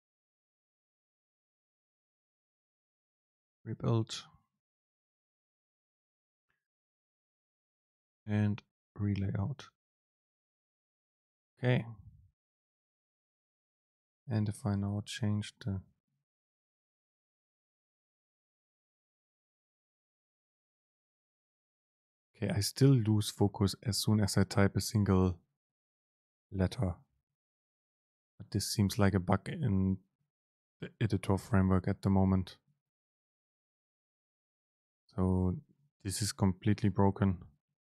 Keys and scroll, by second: 14.7 Right.